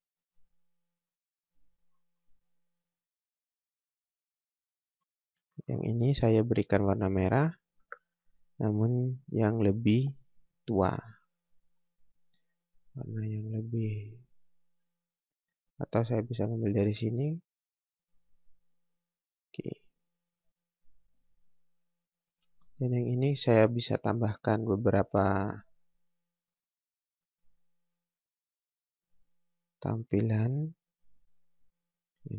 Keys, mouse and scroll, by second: 1.8 scroll down 1, 2.0 scroll up 1, 2.9 click, 4.6 scroll down 1, 4.9 scroll up 1, 7.6 click, 11.6 click, 20.6 scroll down 1, 20.9 scroll up 1, 22.3 scroll down 1, 22.5 scroll up 1.